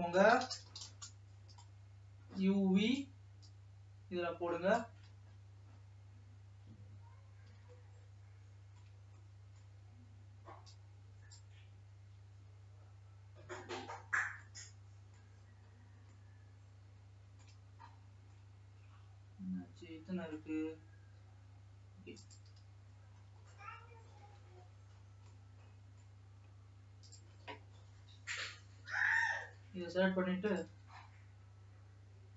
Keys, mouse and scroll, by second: 3.2 click, 3.8-6.7 drag, 6.7 scroll up 2, 7.4 scroll up 2, 8.2-11.7 shift+middle drag, 11.7 click, 14.7 middle click, 15.6 scroll up 3, 16.5-21.8 shift+middle drag, 22.4 click, 25.3-27.3 middle drag, 27.3 click.